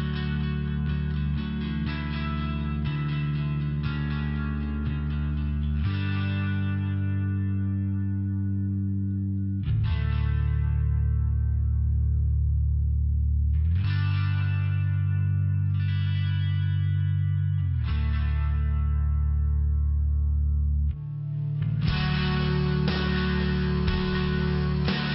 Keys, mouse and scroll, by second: 0.8 Return, 1.0 3, 1.0 Return, 6.3 click, 6.6 click, 9.9 click, 12.4 click, 13.1 5, 13.9 Return, 15.3-17.5 typing, 16.1 Return, 18.2 click, 20.4 click, 22.1 click.